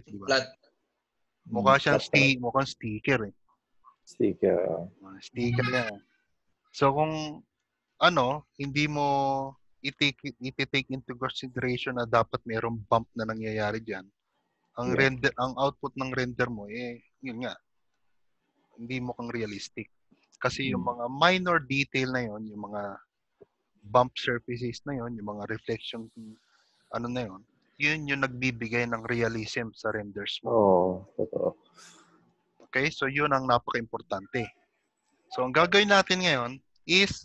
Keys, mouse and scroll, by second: 0.1 shift+middle click, 4.6 click, 5.0-5.3 scroll down 2, 5.7-6.9 scroll down 7, 7.6 scroll down 3, 9.4 click, 9.4 shift+middle click, 9.4 shift+g, 14.8 middle click, 16.4 ctrl+middle click, 17.8 middle click, 21.3 scroll up 2, 25.9 middle click, 28.0 middle click, 32.3 click, 33.4 g, 35.1 shift+middle click, 36.8 shift+middle click, 36.8 click.